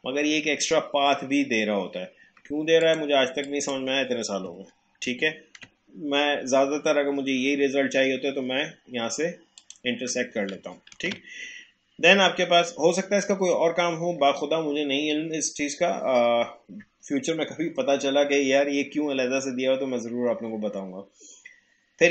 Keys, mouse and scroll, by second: 2.8 click, 5.1 ctrl+z, 9.5 click, 10.9 ctrl+z.